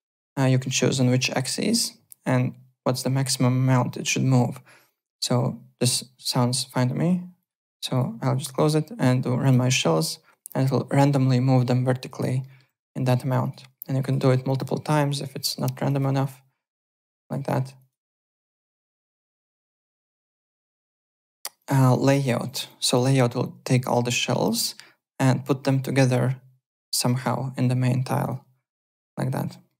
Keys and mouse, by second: 7.4 click, 9.4 click, 12.4 alt+middle click, 13.4 click, 14.0 click, 15.0 click, 17.2 click, 17.8 click, 19.4 alt+Tab, 19.8 alt+click, 21.5 click, 21.9 alt+middle click, 22.0-22.9 typing, 22.4 click, 28.2 click, 29.6 alt+middle click.